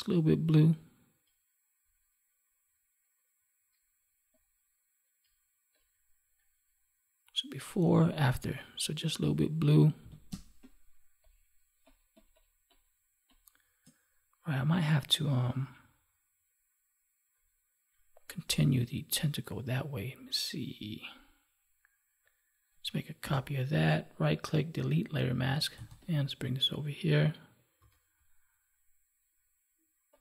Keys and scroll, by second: 9.9 ctrl+s, 10.2 space, 23.2 ctrl+j, 27.7 ctrl+t.